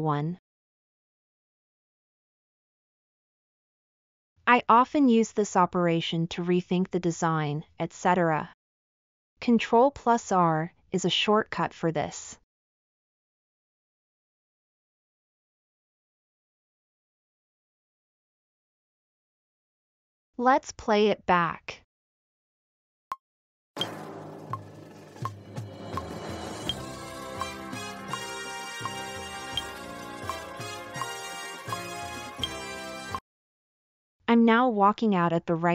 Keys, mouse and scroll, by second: 4.2 click, 19.5-19.9 scroll up 4, 20.2-20.6 middle drag.